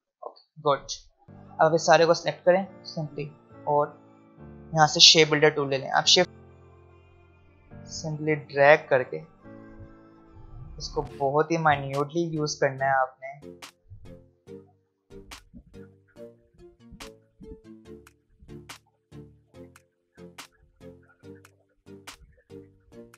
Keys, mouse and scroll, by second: 0.4 click, 1.6-2.9 alt+scroll up 2, 2.9-4.3 alt+scroll up 1, 6.7-15.9 drag.